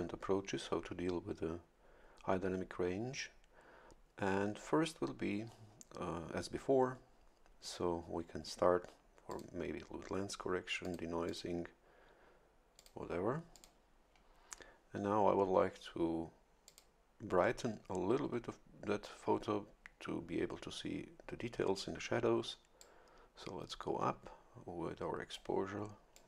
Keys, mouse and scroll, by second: 9.3 click, 10.8 click, 11.2 click, 12.7 click, 13.5 click, 16.6 click, 22.8-25.6 drag, 26.1 click.